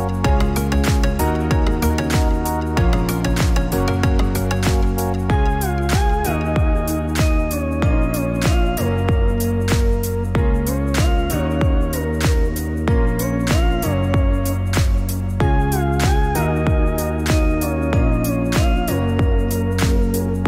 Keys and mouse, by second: 0.9 click, 2.0-15.8 drag, 17.3 click.